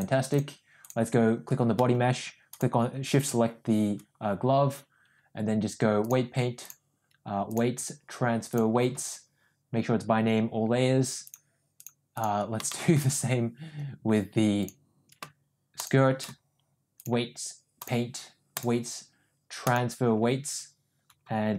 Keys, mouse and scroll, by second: 0.0 click, 6.1 click, 7.5-8.8 drag, 11.3 click, 11.9 click, 12.7 shift+middle drag, 17.0 click, 18.6-20.0 drag.